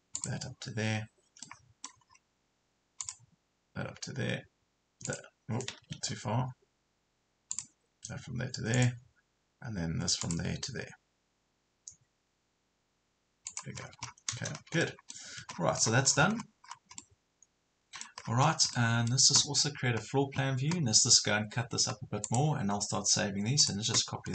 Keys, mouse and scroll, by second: 1.3 scroll up 1, 1.4 middle click, 2.1 scroll up 1, 3.0 click, 6.0 ctrl+z, 7.5 click, 13.8 Escape, 14.0 scroll down 1, 14.6 Escape, 15.0 middle click, 15.4 Escape, 15.6 scroll down 1, 16.4 scroll up 1, 17.0 middle click, 18.2 scroll down 1, 18.8 middle click, 22.3 click.